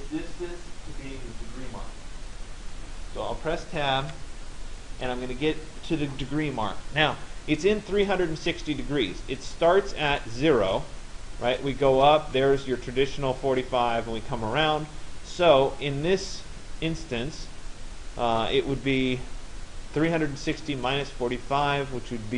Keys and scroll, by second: 3.7 Tab.